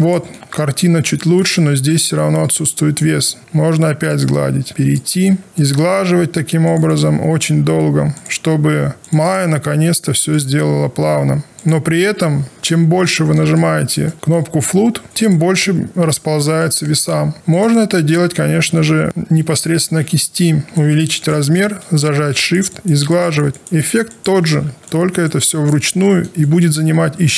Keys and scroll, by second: 20.0 b.